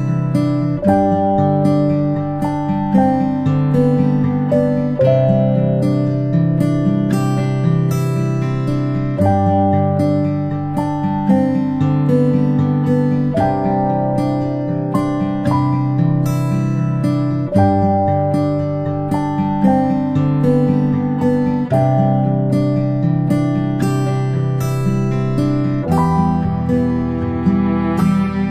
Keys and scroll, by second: 15.8 ctrl+a, 17.3 Return, 19.4-20.7 typing.